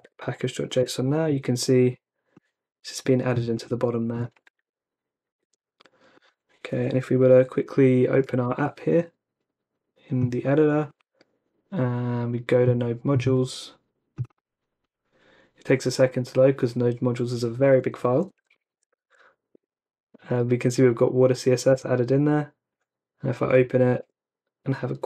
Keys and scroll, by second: 0.0-0.4 typing, 0.8 Return, 1.8-2.5 typing, 4.6 super+Tab, 5.3 super+Tab, 8.2 ,, 8.5 shift+n, 18.1-19.5 typing, 19.5 Return, 23.4 Down, 24.0 Return.